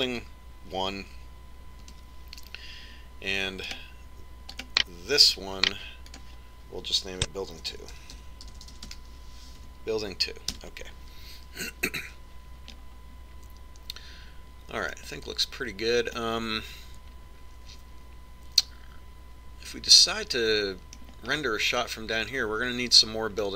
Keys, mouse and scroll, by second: 4.8-7.3 right drag, 7.3-9.0 drag, 16.1-17.7 middle drag, 22.5-23.5 middle drag.